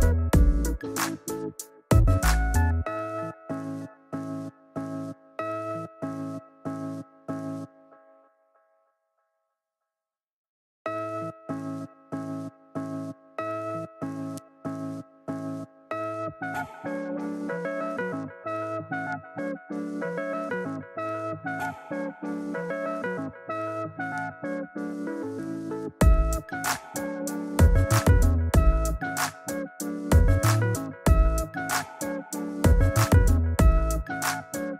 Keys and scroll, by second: 10.9 alt+BackSpace, 12.3 alt+super+d, 13.6 super+t, 31.4 Left, 32.1 Down, 32.5 Left.